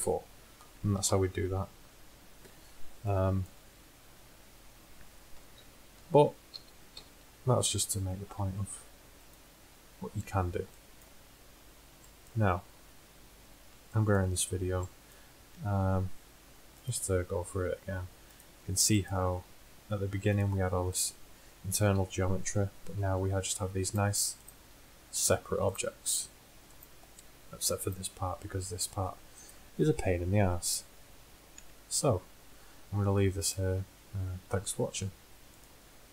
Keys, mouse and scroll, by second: 0.3 middle click, 1.1 KP_1, 3.9 middle click, 4.6 middle click, 5.6 ctrl+z, 6.6 ctrl+z, 7.1 ctrl+z, 7.9-9.4 middle drag, 9.4-11.2 drag, 16.9-17.4 drag, 18.7 click, 22.0 h, 23.0 ctrl+z, 23.4 g, 24.8 g, 26.1 g, 27.7 middle click, 28.3 g.